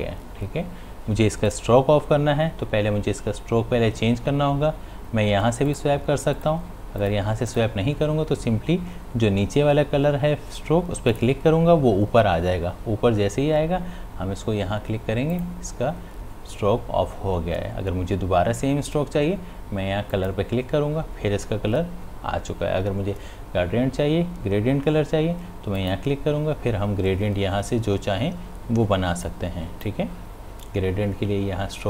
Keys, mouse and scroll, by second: 1.5 click, 5.7 click, 11.1 click, 15.3 click, 20.1 click, 25.8 click, 29.3-31.8 drag.